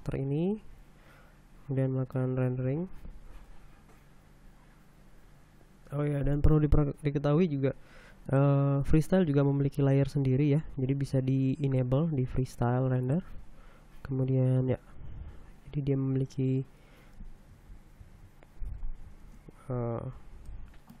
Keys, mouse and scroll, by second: 1.3 click, 3.3 F12, 13.7 middle click, 14.2 scroll down 1, 18.7 ctrl+Left, 19.8 space, 20.4-21.0 shift+scroll down 2.